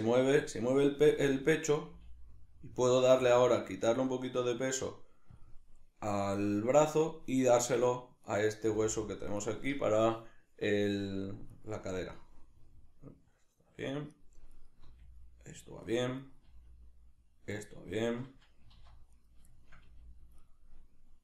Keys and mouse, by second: 0.3 right click, 1.0 r, 1.8 right click, 1.9 g, 5.5 click, 8.3 right click, 8.7 g, 9.5 right click, 11.6 right click, 12.0 r, 14.6 right click, 14.8 r, 16.2 right click, 16.5 r, 18.0 right click, 18.6 g, 19.2 right click, 19.6 shift+middle click, 19.8 g, 20.5 right click.